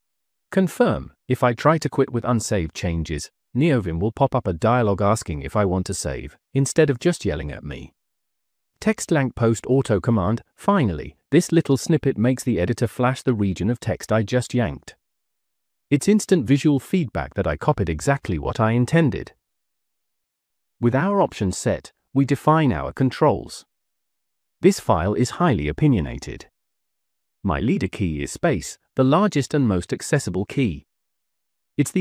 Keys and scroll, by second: 0.4-1.1 typing, 3.8 Escape, 4.4 j, 4.9 j, 6.0-9.9 typing, 20.5 Escape, 23.6 -, 24.6 k, 24.7 k, 25.6 Return, 26.9-29.4 typing, 30.8 k.